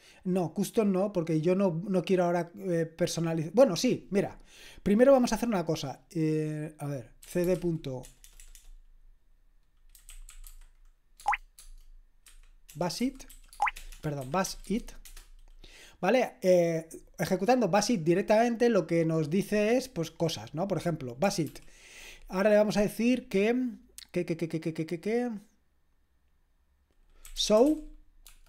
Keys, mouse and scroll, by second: 1.1-7.2 drag, 7.0-8.4 typing, 9.7-11.0 typing, 11.2 Tab, 12.2-15.0 typing, 21.5 ctrl+p, 27.0-28.4 typing.